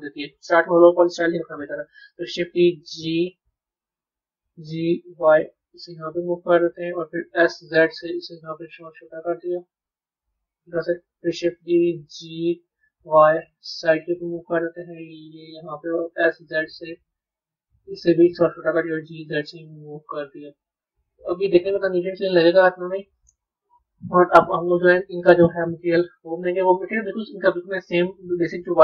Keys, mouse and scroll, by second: 2.3 shift+d, 11.5 shift+d, 21.3-24.4 middle drag, 26.3 click.